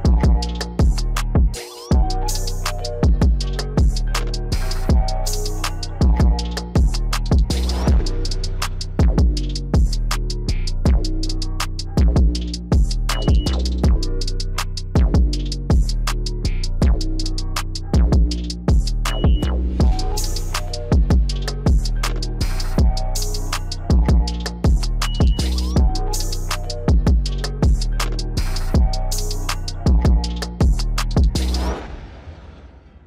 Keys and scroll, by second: 9.4 alt+x, 19.3 ctrl+BackSpace.